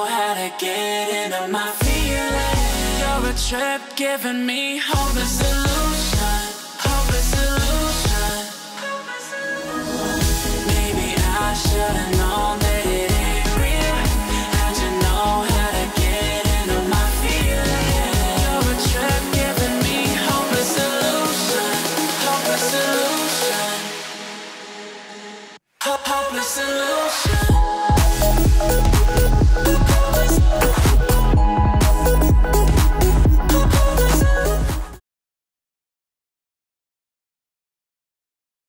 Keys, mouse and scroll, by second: 0.0 alt+scroll down 1, 0.1 alt+scroll up 1, 0.2 click, 0.7 alt+scroll down 1, 1.6 click, 2.0-2.4 alt+scroll down 1, 2.4 alt+scroll up 1, 3.2 click, 6.8-11.1 drag, 13.6-14.1 alt+scroll up 1, 14.7 click, 15.7-16.9 shift+drag, 17.6-18.1 alt+scroll down 1, 18.3 click, 18.7 alt+scroll up 1, 19.3 click, 20.4 right click, 21.7 click, 23.2 alt+scroll down 1, 23.8-24.1 alt+scroll up 1, 24.5 click, 25.8-26.1 alt+scroll down 1, 26.1-26.6 alt+scroll up 1, 27.3 click, 28.0-28.3 alt+scroll up 2, 28.3-28.8 alt+scroll down 2, 28.8-29.7 alt+scroll up 2, 29.7-30.3 alt+scroll down 2, 30.3-31.1 alt+scroll up 2, 31.1-31.9 alt+scroll down 2, 31.9-32.8 alt+scroll up 2, 32.8 click.